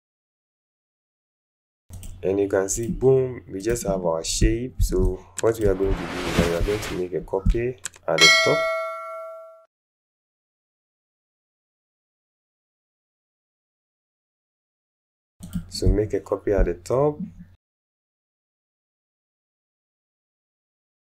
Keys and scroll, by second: 0.9 alt+space, 5.0 alt+space, 5.9 alt+space, 10.5 ctrl+alt+z.